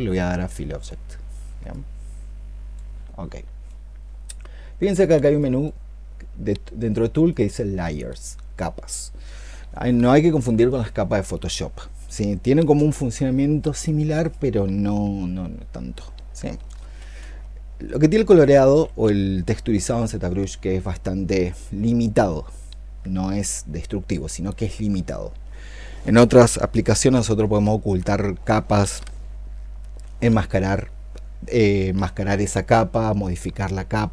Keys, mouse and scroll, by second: 5.2 double click, 16.6-18.7 typing.